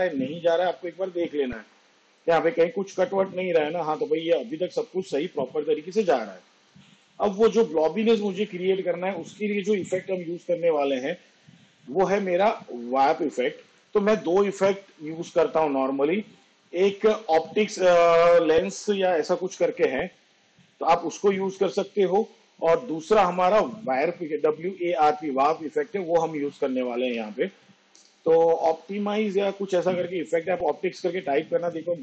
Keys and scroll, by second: 26.8 w, 27.1 a, 28.3 p.